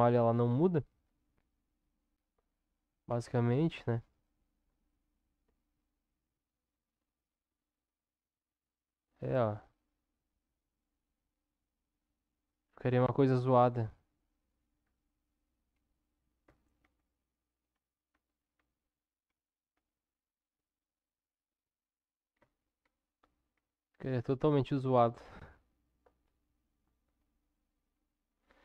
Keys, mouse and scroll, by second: 3.1 Tab, 6.4 click, 16.8 ctrl+z, 17.7 ctrl+z, 18.6 ctrl+z, 19.3 ctrl+z, 19.7 ctrl+z, 21.7 Tab, 22.3 Tab, 23.5 Tab.